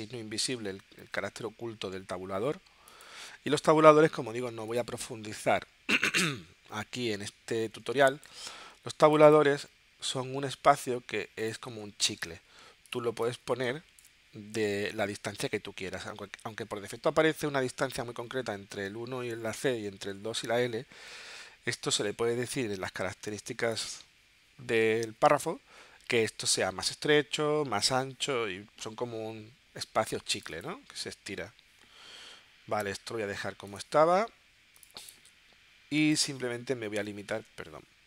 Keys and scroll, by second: 3.2 Tab, 7.8 space, 10.1 Tab, 11.7 Tab, 13.5 space.